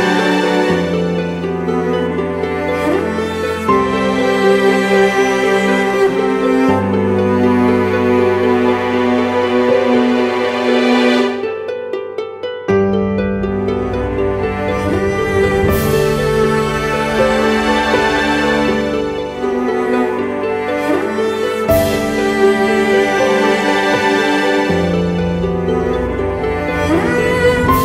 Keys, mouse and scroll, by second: 22.9 double click.